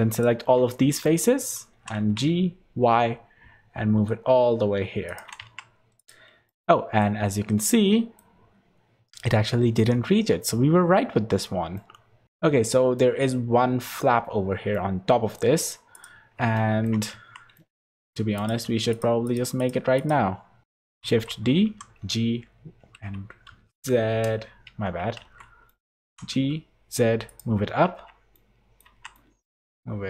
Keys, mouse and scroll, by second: 0.1 alt+shift+click, 1.0 middle click, 1.7 g, 5.4 Tab, 6.0 click, 6.4 middle click, 7.7 middle click, 10.1-10.8 scroll down 1, 11.7 middle click, 12.2 middle click, 12.6 shift+middle click, 14.7 middle click, 15.9 click, 16.5 shift+middle click, 17.1 Tab, 17.5 middle click, 17.9 3, 18.3 click, 18.9 shift+click, 19.9 click, 20.6 shift+click, 21.0 shift+d, 25.7 middle click, 26.0 g, 27.8 Tab, 28.3 middle click, 28.8 Tab, 29.1 middle click, 29.5 g.